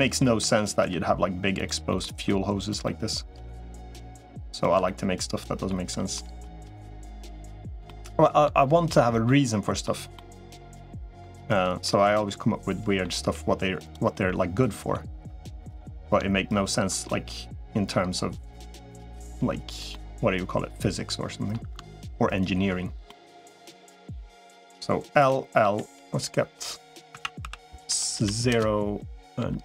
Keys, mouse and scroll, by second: 0.2 r, 0.6 g, 1.7 middle click, 2.0 r, 2.7 middle click, 4.4 ctrl+right click, 4.7 middle click, 6.0 middle click, 6.4 g, 7.3 middle click, 7.7 middle click, 8.8 right click, 9.2 middle click, 10.0 middle click, 11.4 ctrl+right click, 12.0 middle click, 13.0 g, 14.0 middle click, 15.2 r, 15.7 middle click, 16.4 ctrl+right click, 16.9-18.4 middle drag, 18.8 g, 19.7-21.3 middle drag, 22.2 ctrl+right click, 22.9 middle click, 24.2 click, 25.0 l, 25.4 l, 27.0 a, 27.2 s, 29.2 g.